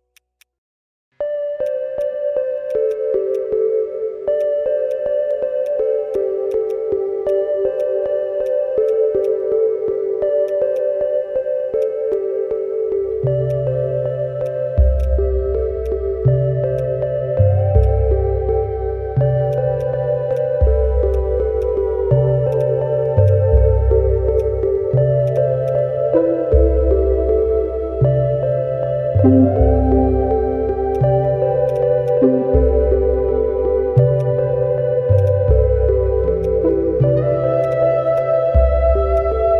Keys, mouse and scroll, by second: 1.8 scroll down 1, 2.5 alt+middle click, 6.6 double click, 12.1-12.7 scroll down 1, 12.7 alt+middle click, 13.4 right click, 13.9 scroll down 1, 14.6 scroll down 1, 15.3 alt+click, 16.1-16.4 scroll down 1, 18.6-19.1 scroll up 2, 19.1 alt+middle click, 19.7 alt+middle click, 20.3 alt+right click, 21.9-22.5 scroll up 1, 22.6 double click, 22.9 scroll down 1, 23.2 alt+click, 24.2 alt+middle click, 24.4 alt+click, 24.8-25.2 scroll up 1, 25.3 double click, 25.6 alt+click, 30.0 scroll down 1, 30.4 alt+middle click, 30.5-30.8 alt+scroll up 1, 30.9 alt+click, 31.7 double click, 33.3-33.6 alt+scroll up 1, 34.1 scroll up 1, 34.2 alt+click, 34.8 ctrl+z, 35.2 double click, 35.5-36.0 scroll down 1, 36.1 alt+middle click, 36.4 alt+click, 37.2 scroll up 1, 37.7 double click, 37.9 scroll down 1, 38.2 alt+click, 39.1 alt+middle click, 39.4 alt+scroll up 2.